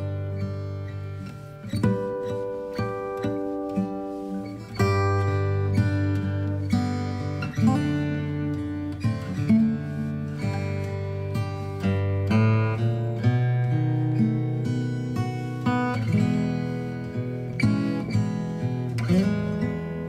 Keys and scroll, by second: 9.2 ctrl+z, 9.9 ctrl+z.